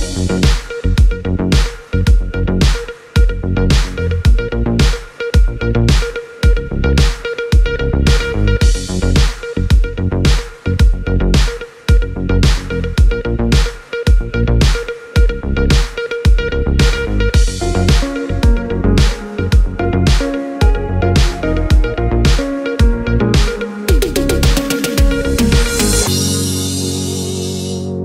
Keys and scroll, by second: 14.2 l, 18.6 s.